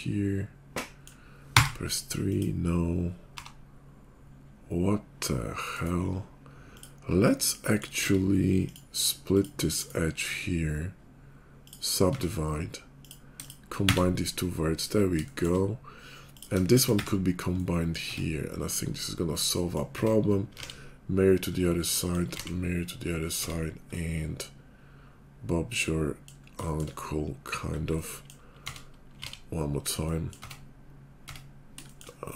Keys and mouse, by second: 1.5 3, 2.3-3.3 drag, 3.3 g, 7.2 middle click, 8.0 Tab, 9.2 click, 9.8-22.3 drag, 12.1 Tab, 14.0 1, 16.2 middle click, 16.2 right click, 18.1 Tab, 19.9 Tab, 20.6 alt+x, 22.3 alt+x, 23.4 Tab, 26.5 shift+click, 27.5 click, 28.6 Tab, 29.2 alt+x, 30.1-32.3 drag, 30.4 Tab, 31.3 Tab.